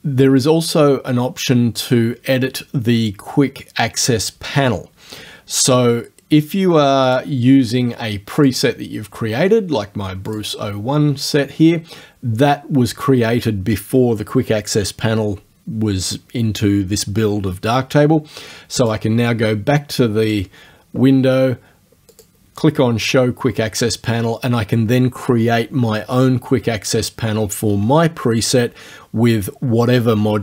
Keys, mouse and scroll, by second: 7.1 click, 8.4 click, 10.3 click, 18.8 click, 20.3 click, 22.2 click.